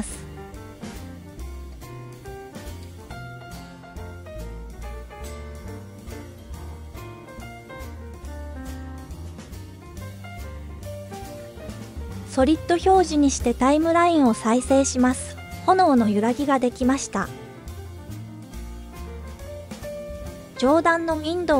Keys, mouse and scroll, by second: 2.4-5.3 drag, 12.2 click, 13.2 click, 15.4 space, 17.4 space, 18.0 scroll up 1, 19.3 scroll up 1, 19.3 space, 20.3 click, 20.8 click.